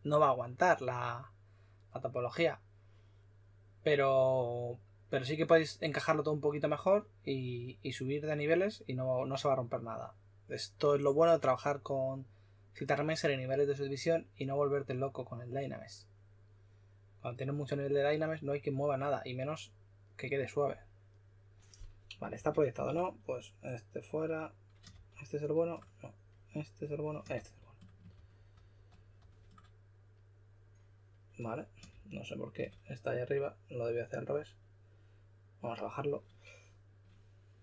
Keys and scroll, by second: 22.1-23.2 typing, 24.9 shift+f, 27.3-29.7 typing, 31.9-32.5 typing.